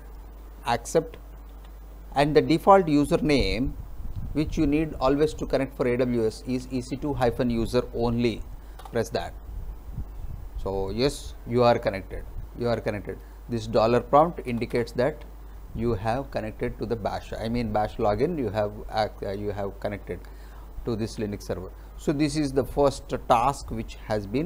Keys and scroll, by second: 1.2 e, 1.6 c, 3.8 2, 4.3 -, 6.2-7.2 typing, 8.9 Return, 14.6 Return.